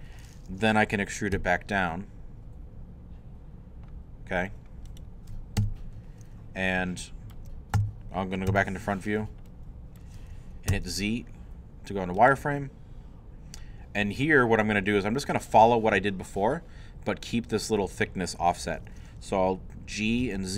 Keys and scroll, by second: 1.3 e, 5.6 3, 8.7 i, 9.2 shift+i, 10.7 shift+z, 11.2 z, 20.2 g.